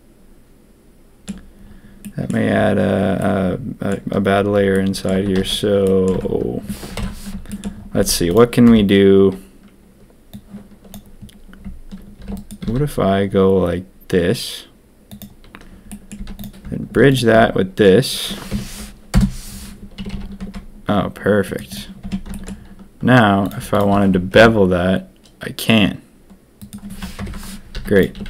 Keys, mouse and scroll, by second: 2.0 middle drag, 3.1-3.8 middle drag, 4.7-5.0 drag, 5.3 ctrl+z, 5.8 drag, 6.1 Tab, 6.9 ctrl+KP_3, 7.9 z, 8.6 b, 12.1 shift+d, 12.6 s, 15.9 middle click, 16.1 z, 17.0 alt+shift+click, 18.5 F3, 19.9 a, 20.1 a, 20.3 Tab, 22.0 Tab, 22.3 shift+click, 24.3 ctrl+b, 27.1 ctrl+KP_3, 27.7 z, 28.1 a, 28.2 a.